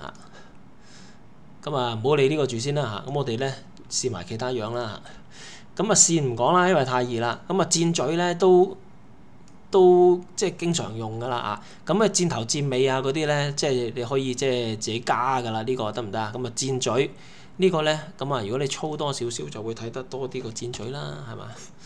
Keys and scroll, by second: 20.5 typing.